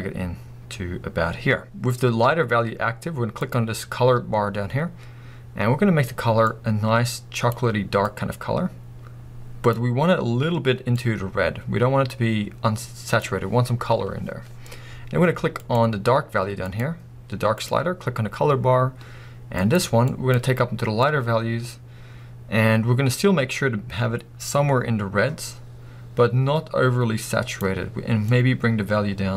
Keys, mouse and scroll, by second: 15.7 click, 16.7-17.8 drag, 19.8-29.3 drag.